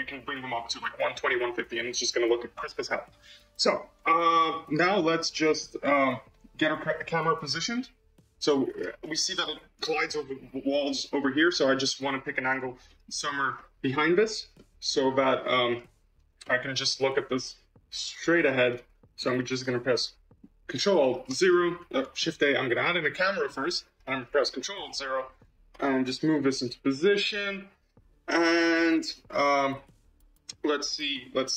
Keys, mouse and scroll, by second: 3.4-3.7 scroll down 2, 3.7-7.2 middle drag, 7.2-8.9 drag, 8.9-10.3 middle drag, 10.3-11.6 drag, 11.6-13.0 middle drag, 13.0-13.5 scroll down 2, 13.5 middle click, 14.1-14.5 scroll down 1, 14.5-15.7 shift+middle drag, 15.7-16.0 scroll up 2, 16.0 scroll down 1, 16.3-18.3 middle drag, 18.3 scroll down 1, 18.6-21.2 middle drag, 21.2 ctrl+alt+KP_0, 22.2 shift+a, 24.6 ctrl+alt+KP_0, 25.7 g.